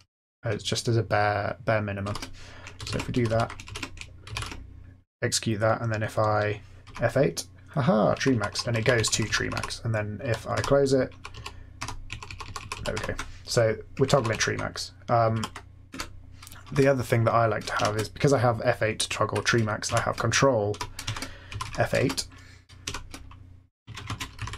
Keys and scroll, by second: 0.9-4.8 typing, 6.5-9.3 typing, 9.4 Up, 10.2 Down, 10.5 F8, 11.1 Up, 11.3 Down, 11.7 F8, 12.0 Up, 12.2 Up, 12.5 Up, 12.7 Down, 12.9 F8, 14.1 Up, 14.1 typing, 15.3 Left, 15.8 Return, 15.8-17.7 typing, 19.8-22.8 typing, 23.9-24.5 typing.